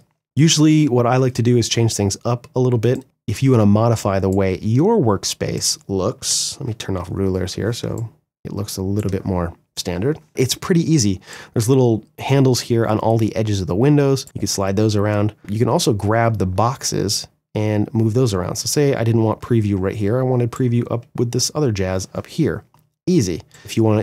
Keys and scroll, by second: 5.8 ctrl+r, 7.0 space.